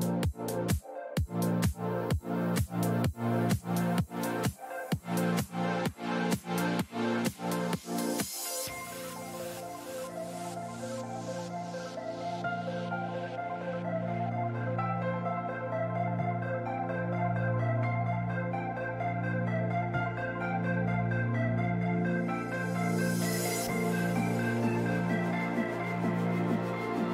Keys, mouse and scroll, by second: 1.0-3.3 drag, 6.9-10.5 middle drag, 9.5 n, 15.6 middle click, 16.1-18.1 drag, 20.8-24.6 drag.